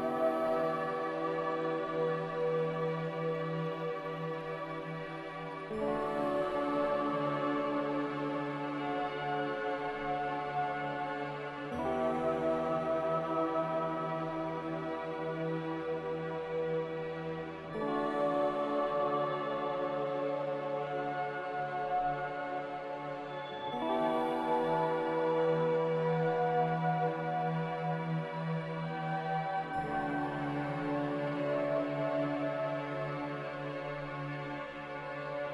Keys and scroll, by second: 10.7-12.2 typing, 13.9-14.7 typing, 16.7 f, 20.1-22.6 typing, 29.2-30.1 typing.